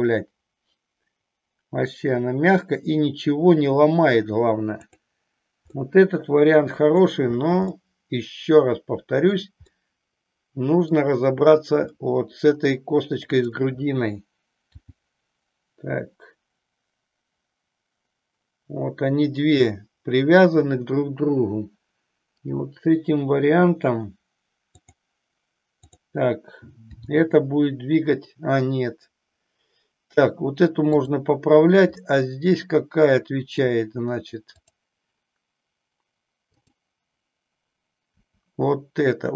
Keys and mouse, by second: 4.9 click, 5.7-7.0 middle drag, 7.8-9.4 middle drag, 9.8-10.9 middle drag, 11.9 middle click, 13.3 click, 14.8 g, 24.9 click, 25.8 click, 27.4 g, 31.9-33.7 middle drag, 34.5-36.4 drag, 36.7-38.5 drag, 38.5 r.